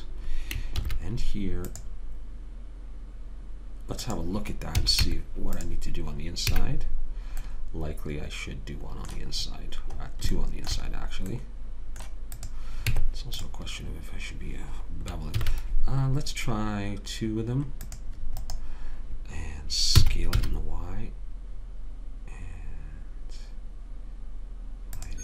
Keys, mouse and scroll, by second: 1.1 ctrl+r, 5.1 a, 5.4 Tab, 6.9 a, 7.9 middle click, 12.7 click, 13.2 Tab, 15.7 ctrl+r, 20.3 s.